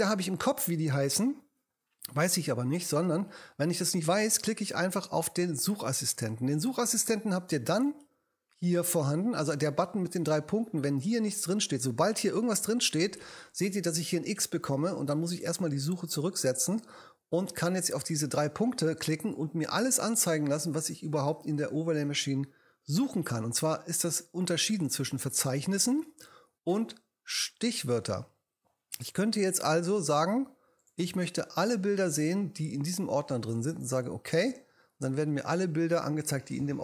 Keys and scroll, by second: 12.3 k.